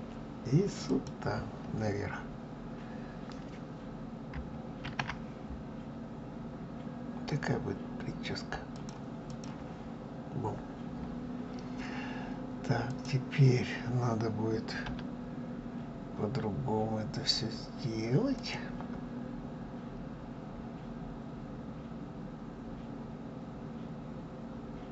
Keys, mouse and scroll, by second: 0.6 click, 9.0 click, 11.3 scroll up 2, 12.6 click, 14.6 r.